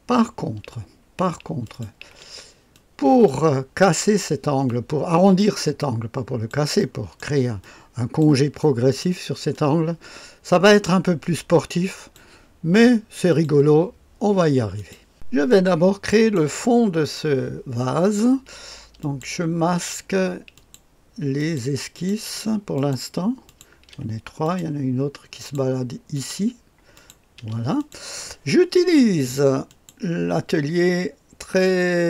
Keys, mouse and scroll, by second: 1.6 click, 2.1 space, 2.7 click, 4.6 click, 6.8 click, 7.6 click, 8.6 click, 9.5-12.2 drag, 13.3 click, 14.7 click, 15.5 click, 16.6 middle click, 19.0 click, 20.5 click, 21.4 click, 22.0 click, 22.3 space, 23.5 click, 23.9 space, 24.4 click, 25.4 click, 26.1 click, 27.0 click, 27.4 space, 29.7 click.